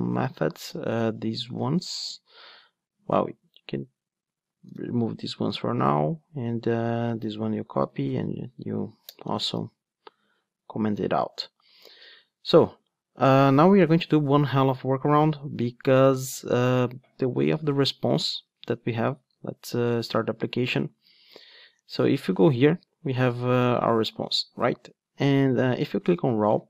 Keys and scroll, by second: 4.7 super+/, 7.4 super+c, 7.8 super+/, 9.4 super+v, 20.0 super+r.